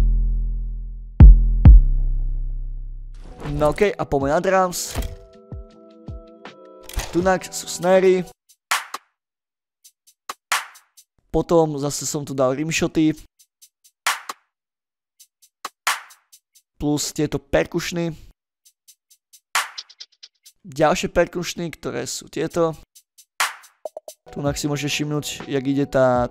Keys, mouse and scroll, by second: 0.1 middle click, 0.3 ctrl+middle drag, 2.1 click, 2.7-3.1 drag, 4.5 click, 6.9 middle click, 7.5 middle drag, 7.7 space, 8.4 middle click, 10.9 space, 13.0 space, 16.6 space, 18.2 click, 18.6 space, 20.4 space, 21.2-22.3 drag, 22.4 space.